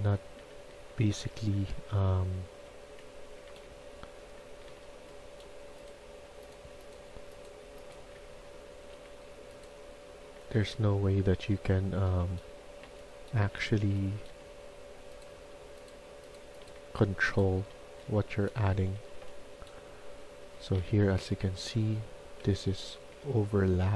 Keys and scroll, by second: 0.0-1.4 typing, 3.1-5.1 typing, 7.6-8.8 typing, 10.5-14.7 typing, 16.3-18.8 typing, 20.0-21.2 typing, 22.3 ctrl+z, 22.8 ctrl+z, 23.2 ctrl+z.